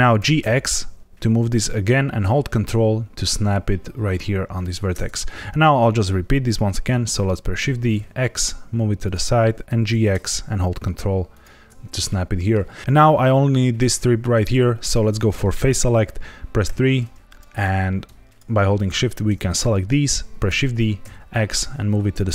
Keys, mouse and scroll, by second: 0.1 g, 0.3 x, 4.5 ctrl+click, 7.5 shift+d, 7.9 x, 9.0 click, 9.6 g, 9.8 x, 11.3 ctrl+click, 12.0 middle click, 16.6 3, 17.2 click, 18.2 shift+click, 18.7 shift+click, 20.4 shift+d, 21.0 x, 22.1 click.